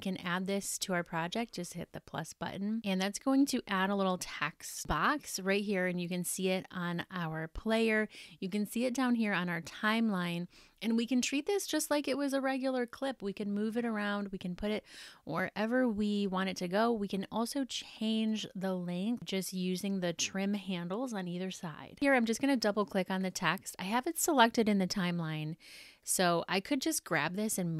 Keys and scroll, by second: 4.2 super+=.